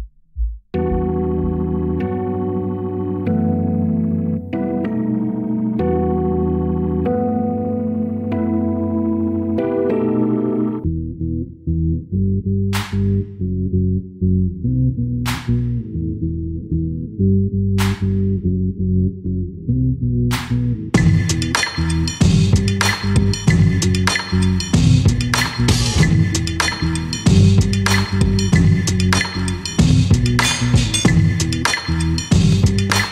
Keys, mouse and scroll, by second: 0.0 click, 1.0 g, 3.5 scroll up 2, 3.9-5.2 middle drag, 5.2-6.0 scroll up 2, 6.0-8.6 middle drag, 8.6 shift+s, 9.6 shift+a, 13.3 scroll down 2, 14.2 middle click, 14.7 g, 16.7 ctrl+3, 17.8 s, 20.8-21.4 scroll up 1, 21.4 shift+click, 22.9 scroll up 2, 23.5-25.5 middle drag, 25.5-26.0 scroll up 3, 26.0-26.7 scroll down 2, 26.7 click, 27.1 Tab, 27.7 click, 28.2 middle click, 28.8-29.4 scroll down 1, 29.4 s, 30.4 Tab, 30.7 s.